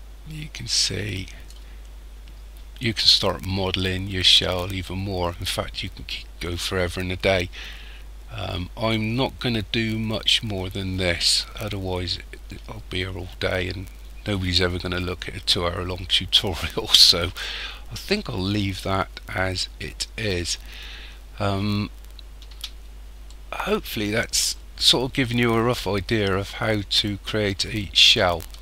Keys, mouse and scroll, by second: 22.5 Tab, 23.2 middle click, 25.3 middle click.